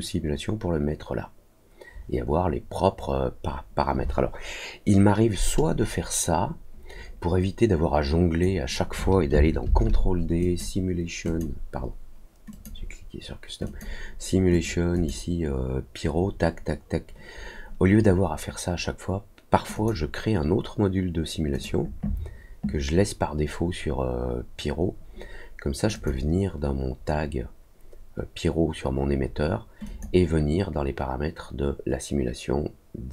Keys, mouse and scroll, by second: 10.3 click, 11.2 click, 12.5-13.7 drag, 14.5 click, 14.9 click, 19.7 click, 21.5 click, 25.9 click, 29.8 click.